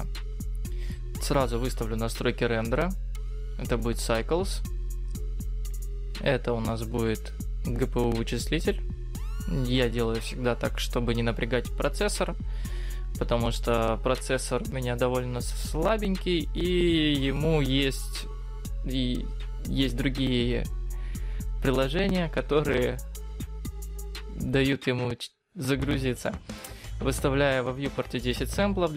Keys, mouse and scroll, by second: 1.4 click, 2.7 click, 6.1 click, 21.4 click, 21.6 click, 21.8 click, 22.0 click, 23.4 click, 23.6 click, 23.8 click, 24.2 click, 24.7 click, 24.9 click, 25.1-26.7 click, 25.5 click, 25.7 click, 26.3 click, 26.5 click, 26.9 click, 27.3 click, 27.9 click.